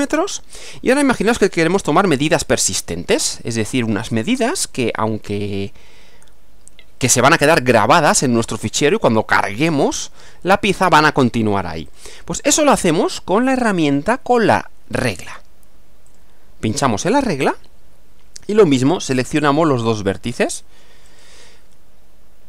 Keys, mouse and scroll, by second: 0.2 click, 1.5-2.5 middle drag, 11.9 click, 16.1 click, 21.1 click.